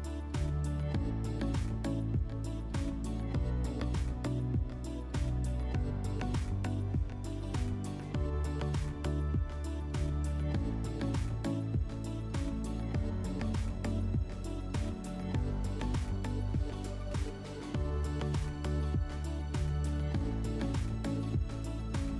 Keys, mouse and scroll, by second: 0.7 click, 2.7 click, 5.4 shift+click, 7.5 click, 9.0 click, 10.9 click, 11.9 click, 12.0 click, 12.8 3, 14.0 click, 15.9 click, 16.9-17.5 drag, 18.1-19.7 drag, 20.4 middle click, 21.1 click, 21.2 click.